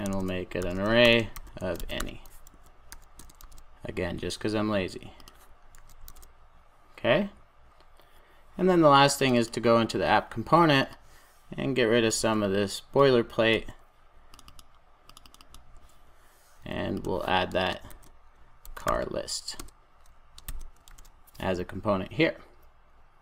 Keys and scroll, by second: 3.4 super+s, 19.7 Return, 20.8 super+s.